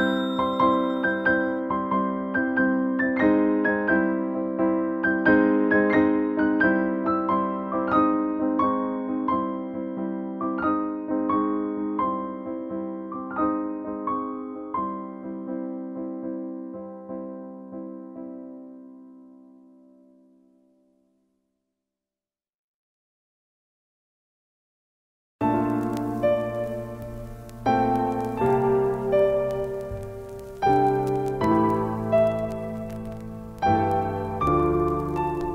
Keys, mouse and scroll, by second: 3.1-12.8 drag, 12.8 Left, 23.7 ctrl+space, 23.9 ctrl+click, 24.1 ctrl+space, 24.8 click, 24.9 space, 34.6 typing.